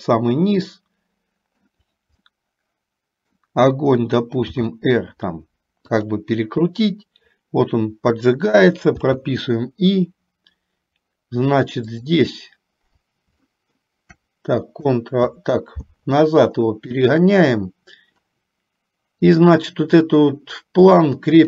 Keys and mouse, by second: 2.4-3.4 middle drag, 4.6 r, 9.6 i, 13.7 shift+middle click, 17.2 click.